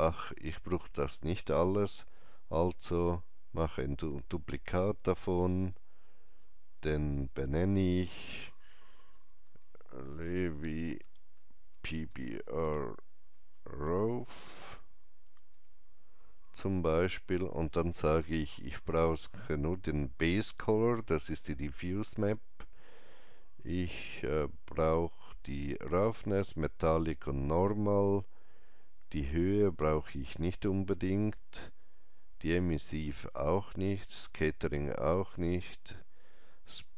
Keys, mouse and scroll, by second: 1.9 click, 1.9 right click, 3.8 click, 6.1 click, 6.9 click, 7.1 click, 9.1-14.8 typing, 10.5 double click, 15.4 Return, 30.9 Return, 30.9 click, 30.9 typing, 33.2 click, 34.2 click.